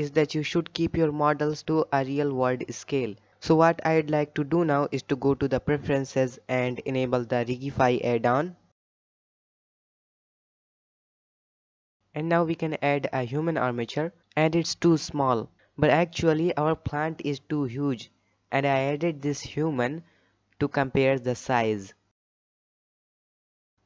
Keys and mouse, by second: 3.4-4.4 drag, 12.2 shift+a, 15.4 middle click, 16.1-16.5 shift+middle drag, 17.2 shift+middle drag, 17.5-17.9 middle drag, 18.2-19.6 middle drag, 19.7 g, 22.0-22.4 middle drag, 22.6 shift+middle drag, 23.5 n.